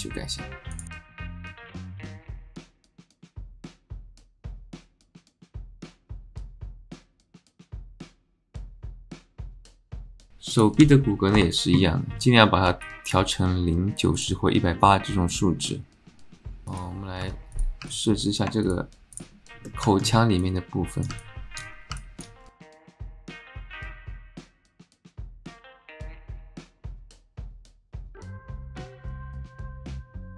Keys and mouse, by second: 0.7 click, 0.9 click, 1.9 shift+s, 3.3 Tab, 3.5 ctrl+z, 3.5 click, 4.5 shift+s, 5.8 alt+click, 6.0 alt+shift+click, 7.8-9.0 drag, 9.5 click, 10.6-12.0 drag, 12.8 alt+shift+middle click, 14.1 click, 15.3-16.6 drag, 16.6 h, 17.2 Tab, 17.9 alt+click, 18.7 shift+click, 19.6 click, 19.9 alt+middle click, 20.4 click, 21.2 alt+middle click, 22.0 alt+middle click, 22.5 alt+middle click, 22.6 click, 22.8 alt+middle click, 23.0 click, 23.1 alt+middle click, 23.3 Tab, 23.4 click, 23.6 h, 23.7 h, 23.9 alt+click, 24.0 alt+click, 24.1 Tab, 24.2 alt+click, 24.5 alt+click, 24.6 alt+click, 24.8 shift+click, 25.0 shift+z, 25.1 alt+click, 25.3 click, 25.6 alt+shift+click, 25.7 click, 26.0 click, 26.2 click, 26.4 click, 26.7 click, 27.0 Tab, 27.1 shift+z, 27.3 alt+click, 27.8 click, 28.0 alt+middle click, 28.1 alt+middle click, 28.2 Tab, 28.3 click, 28.4 middle click, 28.5 click, 28.7 alt+middle click, 28.9 click, 29.2 alt+shift+middle click, 29.3 click, 29.5 click, 30.2 alt+click, 30.3 shift+z.